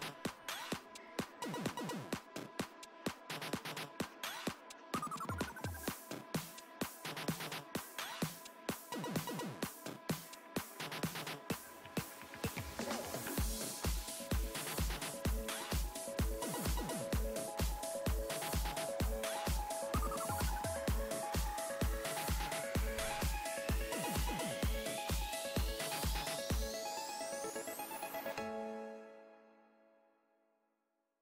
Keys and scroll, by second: 1.4 s, 5.4 s, 8.5 ctrl+z.